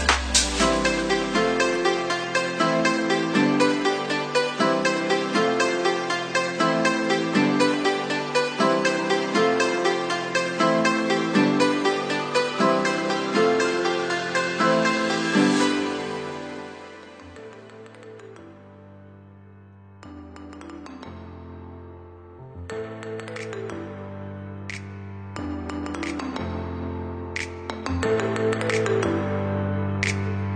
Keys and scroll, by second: 16.8 Delete, 23.9 ctrl+0.